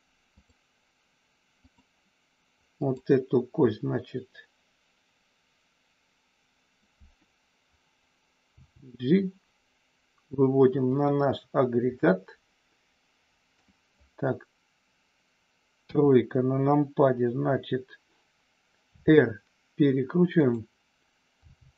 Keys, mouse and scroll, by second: 0.4-1.9 drag, 2.7 click, 8.5 g, 10.9 click, 11.9-13.5 middle drag, 11.9 scroll up 1, 15.8 KP_3, 18.9 r, 21.4 g.